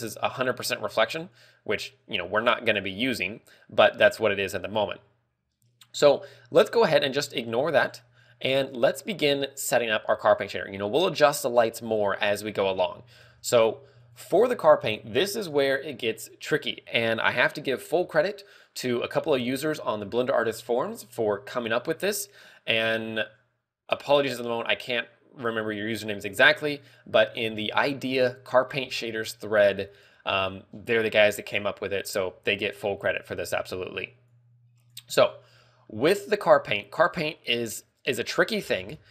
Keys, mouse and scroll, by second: 1.8 click, 8.7 click, 10.2 a, 13.5 click, 15.5 w, 36.8 click, 38.2 click, 38.6 scroll down 1.